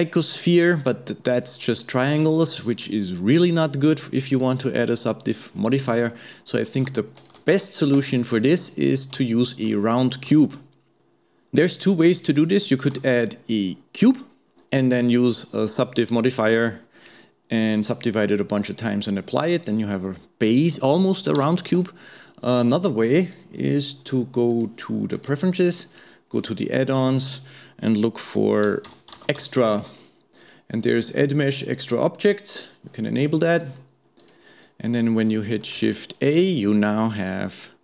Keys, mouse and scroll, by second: 5.5-5.8 scroll down 1, 5.8-6.2 scroll up 2, 6.2-7.2 middle drag, 7.2 shift+click, 7.6 x, 8.6-9.2 scroll up 2, 9.2-10.3 shift+middle drag, 10.3 shift+a, 13.0 shift+a, 23.2-27.6 drag, 35.4 shift+middle click, 35.8 shift+a.